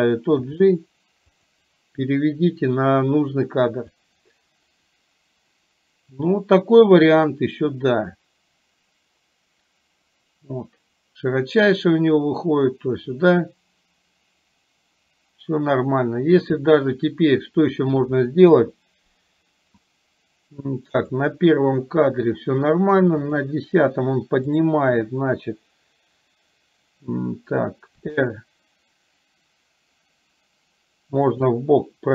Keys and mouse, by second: 0.5 g, 4.0-16.9 drag, 18.6 KP_1, 21.1 click, 23.4 click, 28.1 r.